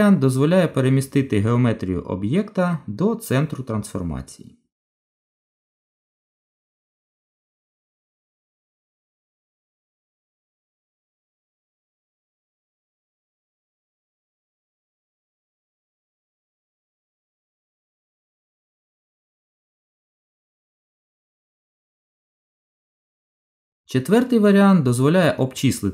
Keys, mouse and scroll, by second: 5.1 middle click, 6.9 Tab, 9.0 click, 10.1 click, 11.0 middle click, 12.2 shift+click, 12.3 shift+click, 12.9 middle click, 16.3 Delete, 18.7 middle click, 20.4 Tab, 21.7 shift+middle click, 22.6 middle click.